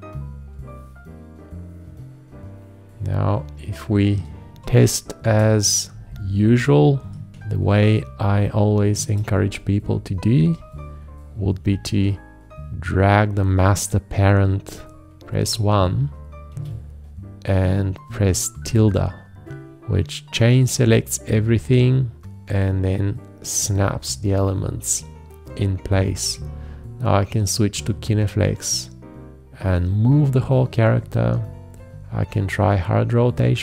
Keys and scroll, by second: 4.5 ctrl+a, 5.9 ctrl+space, 8.9 ctrl+space, 15.4 1, 16.5 ', 26.2 g.